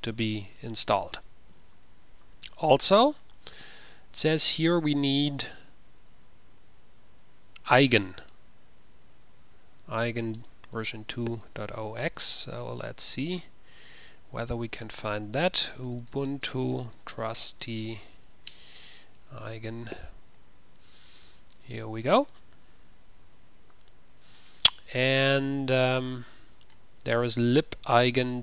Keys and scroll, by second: 11.0 ctrl+v, 11.1 ctrl+c, 15.0 ctrl+a, 15.9-18.9 typing, 19.5 ctrl+v.